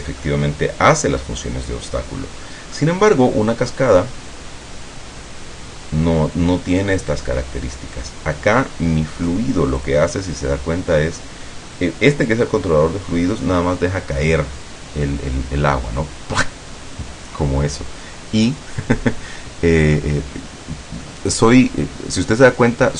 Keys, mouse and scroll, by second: 0.3-1.7 middle drag, 2.9-4.3 middle drag, 9.9 click.